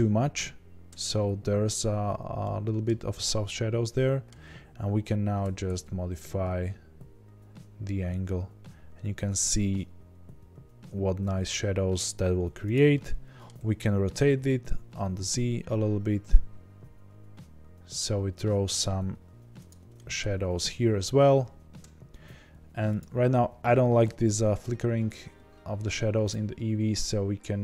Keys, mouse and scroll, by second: 0.4-1.4 scroll down 2, 1.4-2.4 scroll down 1, 5.4 r, 12.7 drag, 12.9-13.5 middle drag, 13.5 r, 19.6 drag, 19.9-21.0 middle drag, 21.0 scroll down 1, 22.1 scroll up 1, 23.1 click.